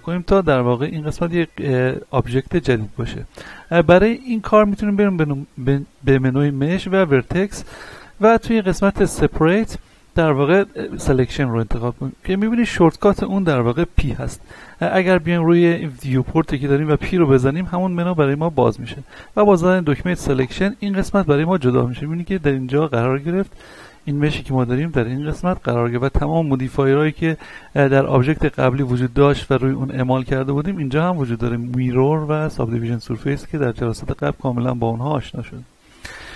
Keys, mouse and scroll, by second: 5.2 click, 14.6 middle click, 15.6-19.5 shift+middle drag, 17.0 p, 20.4 click, 23.6 middle click, 24.3-26.0 drag, 26.0 ctrl+z, 27.6 right click, 31.2 click, 33.7-34.1 scroll down 1, 34.1 middle click, 35.6 click.